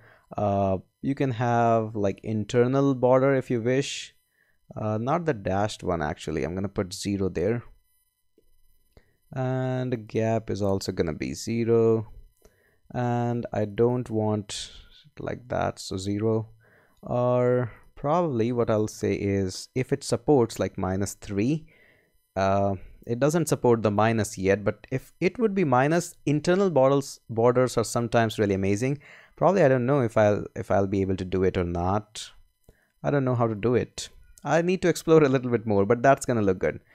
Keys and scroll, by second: 6.9 0, 8.3 Return, 11.1 0, 11.9 Return, 14.6 0, 15.2 Return, 20.5 -, 20.7 3, 20.9 Return.